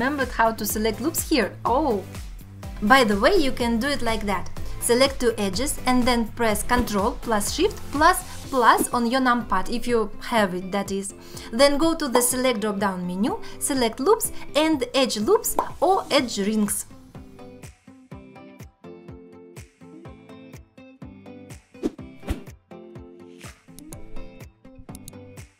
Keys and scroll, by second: 3.0 x, 17.6 x, 21.0 ctrl+z.